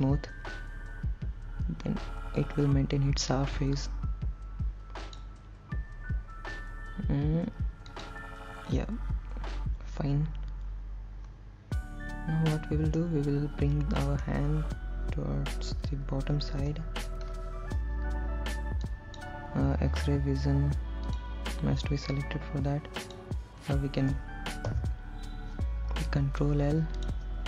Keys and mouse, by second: 8.2 click, 13.2-14.5 middle drag, 16.9 KP_1, 19.1 click, 21.3 click, 22.5-23.5 drag, 24.9 ctrl+l, 27.2 click.